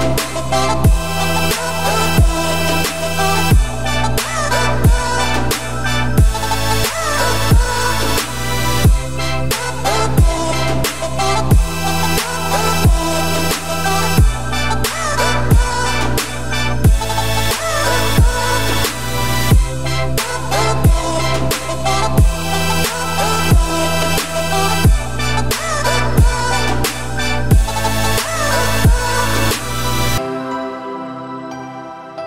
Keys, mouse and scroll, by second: 0.4 click, 1.1 click, 1.3 Tab, 1.6 click, 2.3 alt+click, 3.1 click, 4.0 ctrl+b, 9.6 Tab, 10.0 scroll down 3, 10.2 Tab, 10.5-10.9 scroll up 3, 10.9 g, 12.7 Tab, 12.9 click, 13.2-13.6 scroll down 4, 13.6 ctrl+s, 13.9-14.8 scroll down 6, 14.8-15.3 scroll up 3, 15.3 click, 15.8-17.5 middle drag, 17.5 Tab, 18.0 click, 18.2 2, 18.6 1, 18.8 click, 19.3 shift+s, 19.7 Tab, 20.6 shift+a, 22.7-24.5 drag, 25.0 Tab, 25.6 a, 25.9 s, 27.2 `, 27.9-28.2 scroll down 5, 28.2 middle click, 28.7 s, 29.9 middle click, 30.5 g.